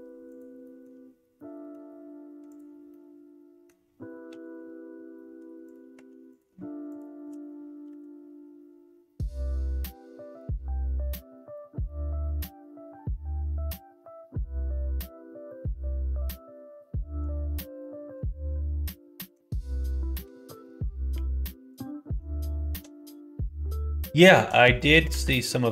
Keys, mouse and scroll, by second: 0.3 click, 0.6 middle click, 1.3 middle click, 2.4 click, 2.9 middle click, 4.2 e, 5.9 1, 6.2 click, 6.8 shift+click, 7.8 m, 19.3 middle click, 21.1 2, 21.7 click, 22.6 click, 23.0 middle click, 24.1 shift+middle click, 24.7 middle click, 25.1 f, 25.5 middle click.